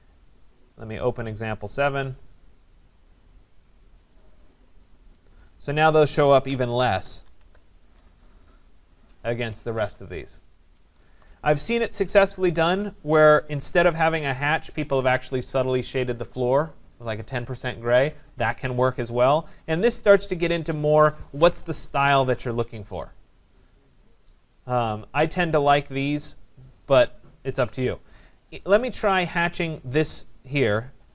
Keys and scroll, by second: 6.9 ctrl+=.